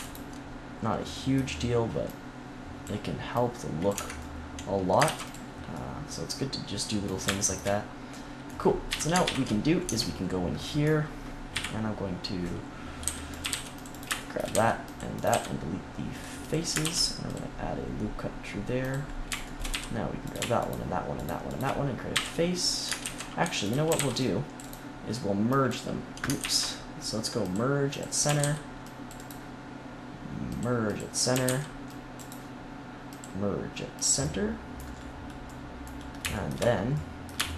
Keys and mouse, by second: 0.8-2.0 middle drag, 2.0 click, 3.9 Tab, 5.0 ctrl+s, 8.8 KP_3, 9.2 ctrl+KP_1, 9.8 Tab, 10.4 middle click, 10.6 middle click, 11.5 KP_3, 13.0 c, 13.4 z, 13.4 c, 14.5 c, 15.2-16.8 drag, 15.2 x, 16.8 ctrl+r, 18.9-20.3 drag, 19.6 z, 22.1 f, 23.0 ctrl+z, 23.8 a, 23.9 c, 26.3 ctrl+z, 28.2 a, 28.3 c, 31.3 a, 31.5 c, 34.2 click.